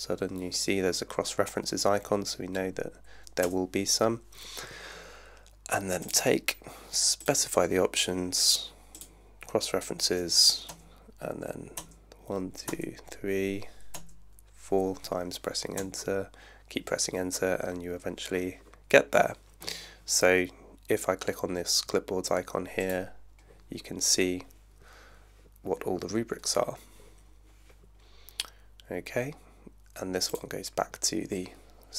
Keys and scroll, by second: 3.4 Return, 10.8 Return, 15.8 Return.